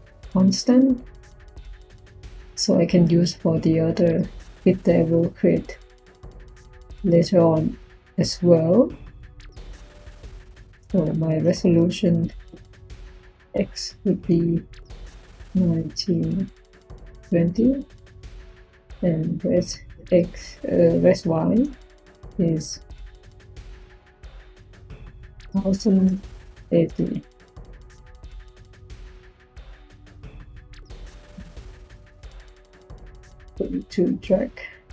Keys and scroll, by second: 0.0-1.6 typing, 11.5-13.3 typing, 14.9-16.8 typing, 18.8-20.5 typing, 21.5 y, 22.8-24.5 typing, 25.6-27.1 typing.